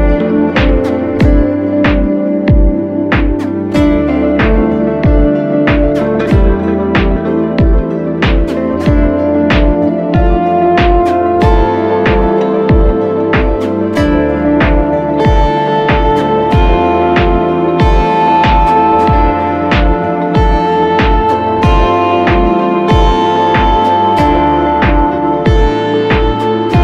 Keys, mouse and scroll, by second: 5.1 typing, 6.0 double click, 6.5-7.6 typing, 7.0 double click, 7.9 double click, 10.4 ctrl+=, 11.6 double click, 18.9 ctrl+-, 19.1 ctrl+-, 24.6-25.2 alt+scroll down 1, 25.2-26.0 alt+scroll up 1.